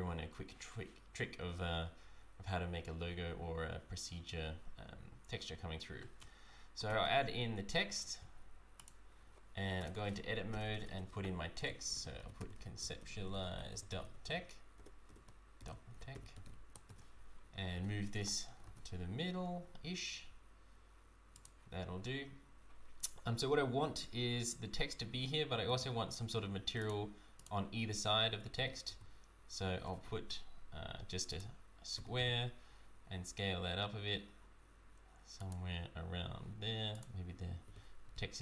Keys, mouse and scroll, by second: 6.8 shift+a, 9.8 Tab, 10.5-16.4 typing, 16.9 Tab, 17.7 g, 21.9-24.1 scroll down 1, 25.6 shift+a, 28.5 g, 36.9 click, 37.6 g.